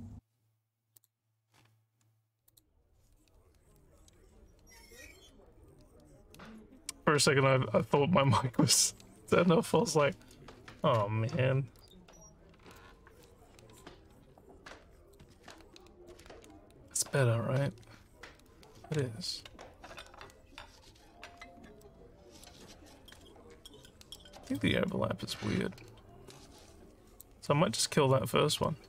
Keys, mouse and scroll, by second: 0.9 click, 2.5 click, 11.9 click, 13.3-15.2 alt+drag, 15.9 alt+click, 19.3 alt+middle click, 21.8 alt+middle click, 24.2 alt+middle click, 24.6-27.2 alt+drag.